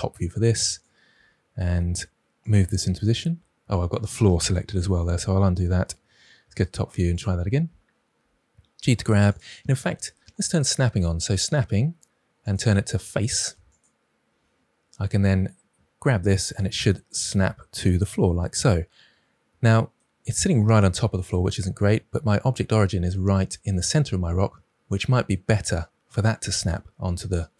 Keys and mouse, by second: 0.6 click, 1.0 g, 4.7 ctrl+z, 6.4 KP_7, 7.1 click, 8.1 g, 11.1 click, 14.9 drag, 15.9 g.